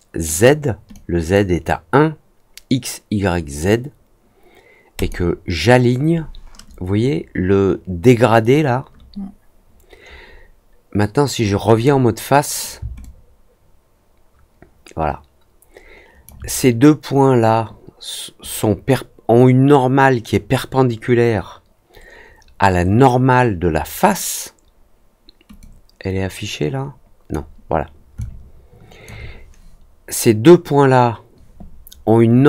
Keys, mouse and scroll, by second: 0.2 click, 0.9 click, 4.9 click, 11.6 click, 12.9-16.2 alt+drag, 25.5-27.2 drag, 28.1 alt+click.